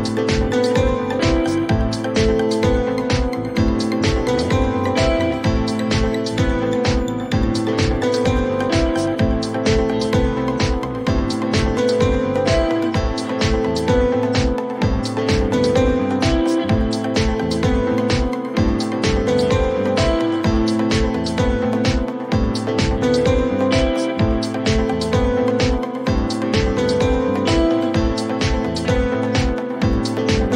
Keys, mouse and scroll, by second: 0.8 click, 1.3-1.9 typing, 4.3 click, 5.3 click, 7.9-8.8 typing, 16.3 click, 19.7 click, 21.8 click.